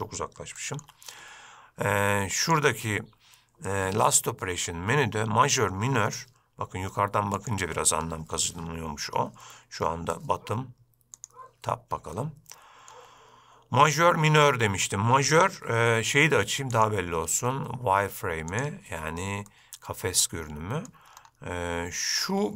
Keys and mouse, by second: 0.7 shift+middle drag, 2.6 click, 11.3 click, 12.3-13.1 shift+middle drag, 17.1-19.1 drag, 19.6-21.1 middle drag.